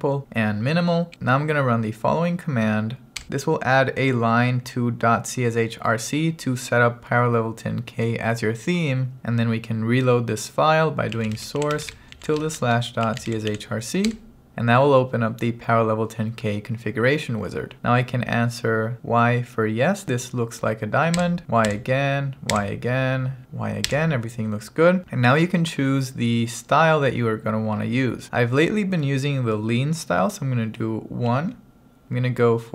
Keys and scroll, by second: 11.0-14.0 typing, 14.1 Return, 21.2 y, 23.9 y, 31.3 1.